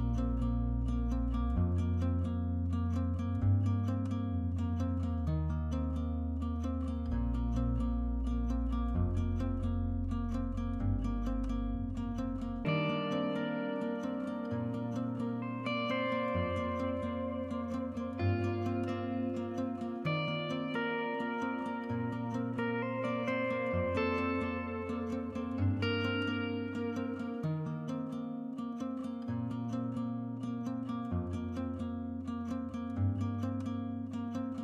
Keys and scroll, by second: 5.8 5, 10.6 1, 14.9 3, 19.3 Escape, 22.0-22.3 typing, 26.8-28.6 typing.